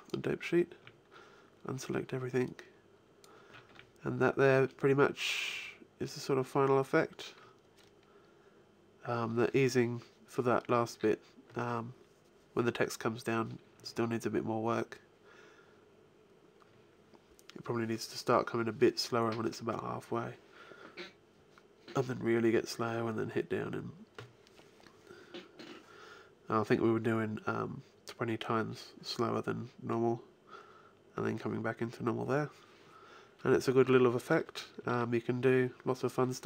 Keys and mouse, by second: 0.3-1.5 drag, 0.6 a, 2.3-3.3 drag, 3.5 alt+a, 34.7 alt+a.